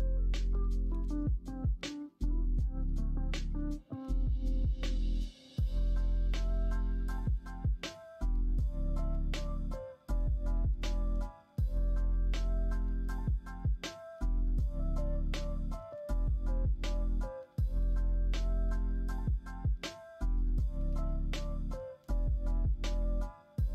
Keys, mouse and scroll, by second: 0.0 KP_3, 5.8 KP_9, 9.4 g, 12.1 s, 20.8 g.